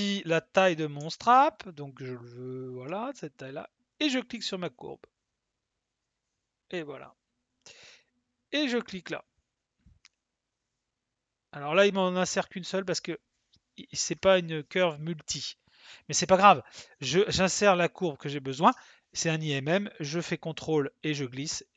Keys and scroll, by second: 0.9 s.